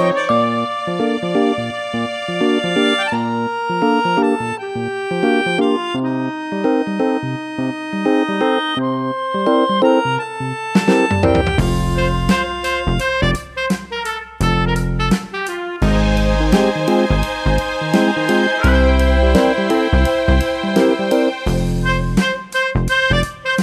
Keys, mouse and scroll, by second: 7.0 click, 9.9 click, 13.1 click.